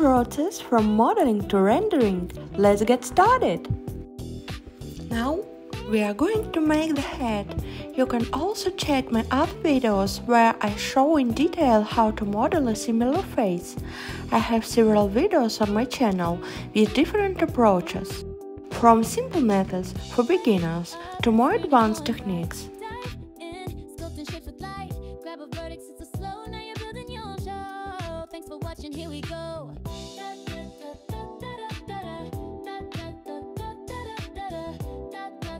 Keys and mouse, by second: 1.4 s, 2.7 click, 6.7-7.9 drag, 11.0 s, 12.9 click, 13.9 s, 14.2 z, 16.2 click, 17.0 click, 17.2-18.5 drag, 19.2 s, 21.4 click, 22.3 click, 22.7-24.2 drag, 26.5-27.5 drag, 28.2 Tab, 28.3 click, 31.7-34.7 drag.